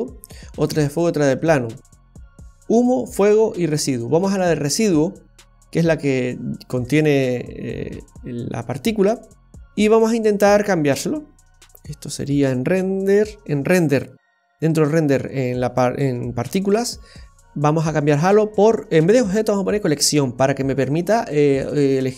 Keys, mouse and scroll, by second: 0.5 click, 0.9 click, 2.6 click, 3.1 click, 5.2-6.0 scroll down 2, 7.2-8.1 scroll down 2, 8.1-8.5 scroll down 1, 8.5-9.1 scroll up 4, 9.1 scroll down 1, 9.3-10.8 scroll down 10, 12.2 click, 17.7 click.